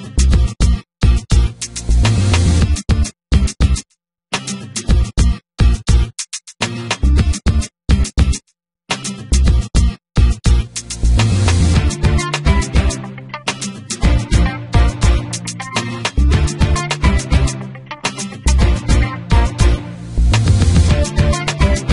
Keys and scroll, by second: 1.1 s, 1.6 y, 3.4 s, 3.7 z, 5.9 r, 6.4 x, 8.9 r, 9.2 y, 11.2 r, 11.5 z, 14.3 Tab, 20.1 g, 20.2 z.